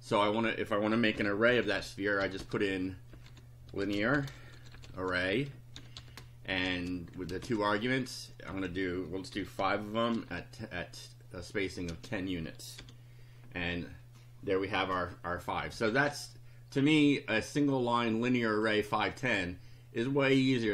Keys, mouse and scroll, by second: 0.9-7.4 typing, 7.1 shift+Right, 7.5 shift+Left, 8.5-10.7 typing, 11.9 space, 12.8 F5, 16.0 Down, 18.2 click, 20.4 click.